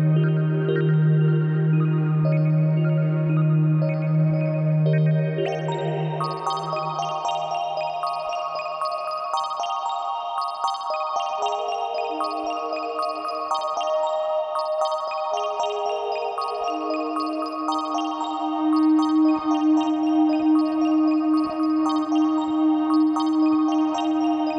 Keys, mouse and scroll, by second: 4.3-6.2 drag, 10.5 click, 12.9 KP_Enter, 12.9-24.5 drag, 14.4 KP_Enter, 19.2 KP_Enter.